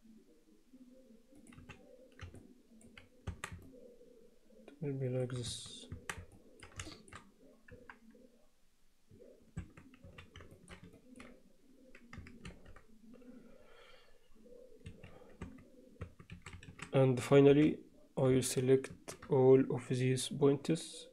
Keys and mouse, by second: 1.6 z, 2.4 alt+middle click, 3.3 Tab, 3.7-5.3 middle drag, 5.5 Tab, 6.0 Tab, 6.4 middle click, 6.9 alt+shift+middle click, 7.7 KP_1, 9.6 Tab, 10.1 z, 10.5 alt+shift+middle click, 11.0 ctrl+click, 12.5 ctrl+r, 15.5 Tab, 16.1 Tab, 16.4 a, 17.5 b, 18.9 shift+s.